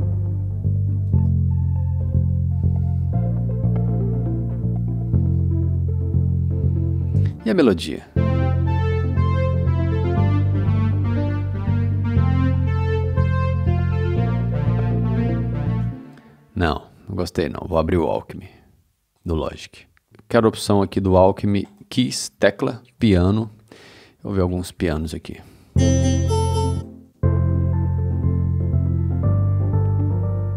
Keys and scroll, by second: 1.1 c, 7.1 space, 8.0 space, 15.7 space, 25.5 space.